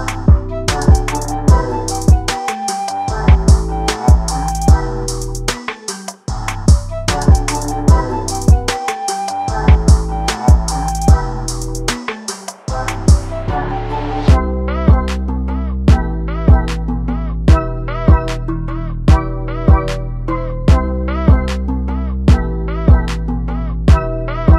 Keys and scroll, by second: 6.4 ctrl+t.